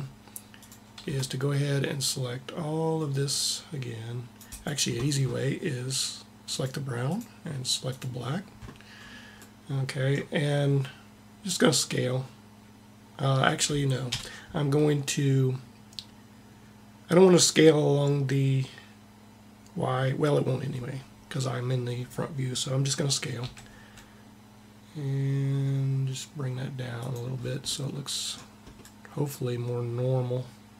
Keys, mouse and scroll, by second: 0.4-2.0 drag, 0.9 c, 6.2-8.2 drag, 13.9 KP_1, 23.2 s, 27.2 middle click.